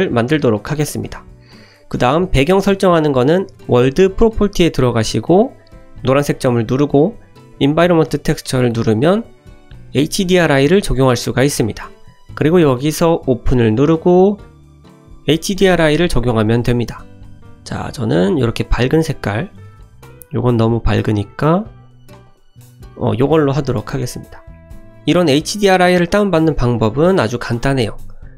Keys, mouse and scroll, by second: 6.3-9.0 drag, 13.1 click, 19.7 click, 24.5 shift+middle click, 25.1 middle click.